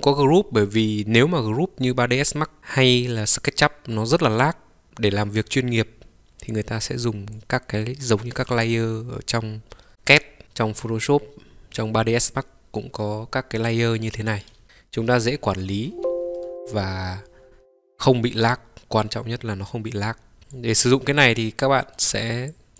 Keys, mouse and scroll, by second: 20.4 click, 21.2 middle click, 22.6 click.